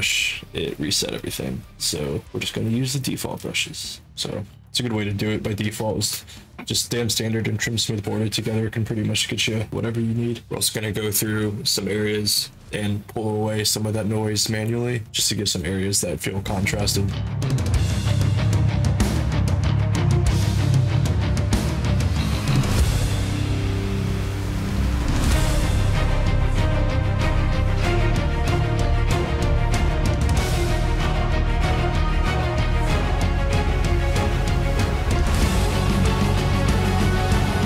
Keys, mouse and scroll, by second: 21.9 click.